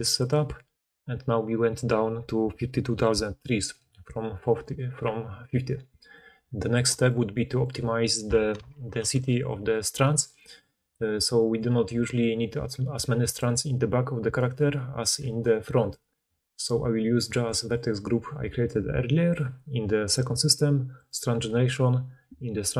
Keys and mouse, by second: 8.5 alt+h, 8.9 alt+a, 11.3-15.9 drag, 11.8 d, 13.3 d, 13.4-15.9 right drag, 13.4 d, 14.3 d, 15.1-16.0 d, 17.1 d, 17.2 d, 20.1-22.7 drag.